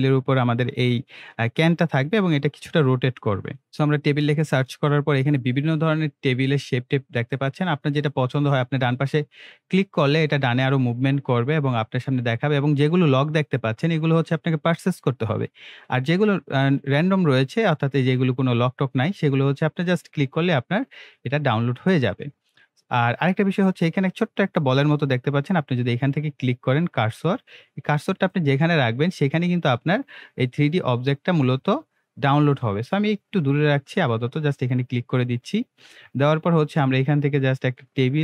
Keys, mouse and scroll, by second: 0.0-0.2 typing, 1.8 Return, 3.7 click, 7.8 click, 12.2 click, 22.0 click, 27.2 click, 28.9-29.2 scroll up 1, 29.2-29.8 scroll down 1, 29.8-31.0 middle drag, 31.2-31.5 scroll up 1, 31.5-31.9 scroll, 31.9 scroll down 1, 32.8 click.